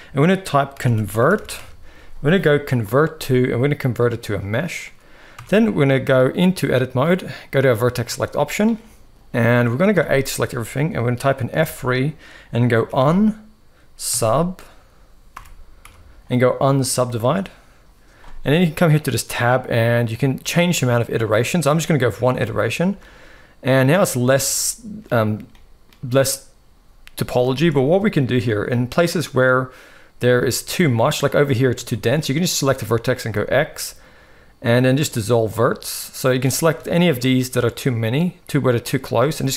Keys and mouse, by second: 5.1 Tab, 7.3 click, 7.9 shift+middle click, 11.3 F3, 11.3 a, 18.7 click, 19.8 click, 22.4 shift+middle click, 24.2 shift+middle click, 25.2 shift+middle click, 27.2 shift+middle click, 28.1 shift+middle click, 30.1 shift+middle click, 31.0 click, 31.6 shift+middle click, 33.0 x, 36.6 shift+middle click, 37.4-38.8 shift+drag, 38.9 x.